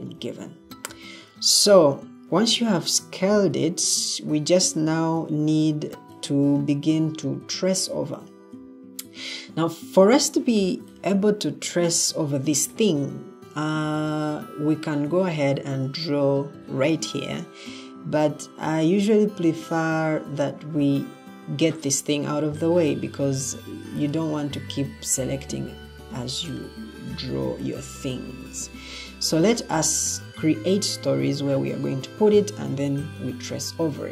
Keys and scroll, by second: 0.1 Escape, 5.4 ctrl+d, 23.6 Escape, 25.0 Escape, 28.5 Escape.